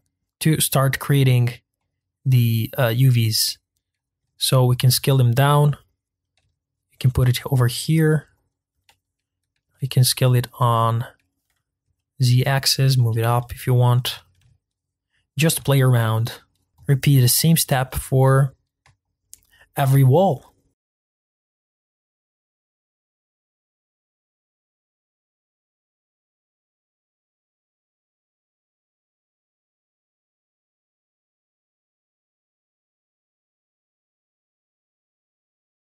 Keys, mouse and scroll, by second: 2.8 s, 4.2 g, 6.4 g, 8.8 s, 14.4 g, 16.7 scroll down 3, 16.8 click, 17.0-17.4 scroll up 1, 17.4 shift+middle click, 18.3-19.0 scroll up 3, 19.1 shift+click, 19.3-20.5 middle drag, 20.5 shift+click, 20.7 middle click, 20.8-28.5 typing, 20.9 click, 21.1 middle click, 21.3 click, 21.4 middle click, 21.6 click, 21.8 middle click, 22.0 click, 22.4 scroll down 2, 22.5 middle click, 22.6 click, 22.9 middle click, 23.0 click, 23.3 middle click, 23.4 scroll up 4, 23.7-24.2 scroll down 5, 23.9 click, 24.2 shift+middle click, 24.3 shift+click, 24.7 click, 24.9 shift+middle click, 25.2 click, 25.3 click, 25.7 scroll down 10, 25.7 shift+middle click, 25.9 scroll up 1, 26.2 click, 26.2 shift+middle click, 27.2 middle click, 27.3 click, 28.6 scroll down 1, 28.7 shift+middle click, 28.9-29.3 scroll up 8, 29.0 middle click, 29.3 Tab, 29.6 g, 29.7 s, 29.9 click, 29.9 scroll down 3, 30.0 shift+middle click, 30.5 shift+middle click, 30.8 g, 30.9 s, 31.4 click, 31.5 click, 31.7 middle click, 31.8 click, 31.9 middle click, 32.2 click, 32.3 click, 32.4 s, 32.6 scroll up 2, 32.8 scroll down 2, 32.9 middle click, 33.0 click, 33.1 middle click, 33.3 click, 33.6 s, 34.1 scroll up 1, 34.3 click, 34.3 shift+middle click, 34.4 shift+click, 34.6 s, 34.9-35.3 scroll down 4, 35.0 middle click, 35.2 Tab, 35.3 middle click.